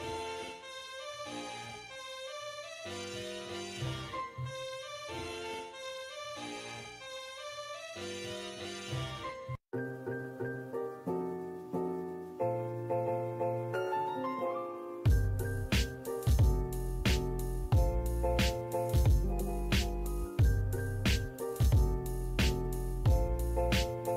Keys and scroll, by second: 6.2 l, 6.3 space, 7.4-8.3 typing, 9.0 Escape, 14.1 e, 14.1 space, 17.8 m, 18.0 space.